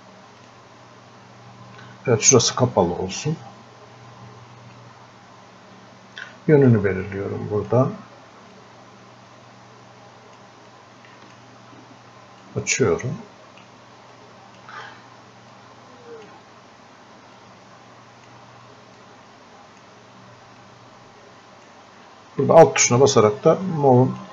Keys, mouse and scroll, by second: 4.8-24.3 drag.